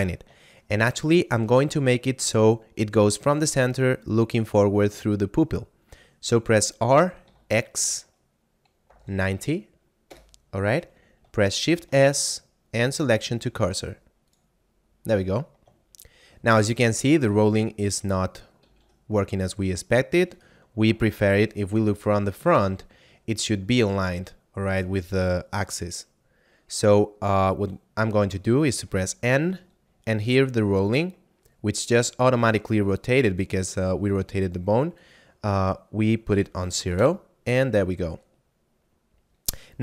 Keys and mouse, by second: 0.4 shift+middle click, 6.7 r, 7.3 x, 8.7 9, 9.0 0, 10.0 Return, 11.6 shift+s, 14.2 click, 16.0 shift+middle click, 18.5 ctrl+r, 20.3 right click, 21.2 KP_1, 21.7 z, 23.1 middle click, 28.7 n, 30.8 click, 34.8 click, 36.4 0, 37.0 Return, 38.4 middle click.